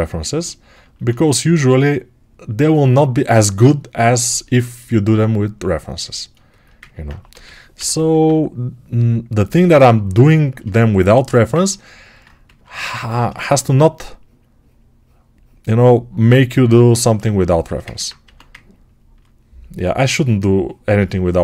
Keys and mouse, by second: 7.2 g, 7.6 ], 7.9 ], 18.1 1.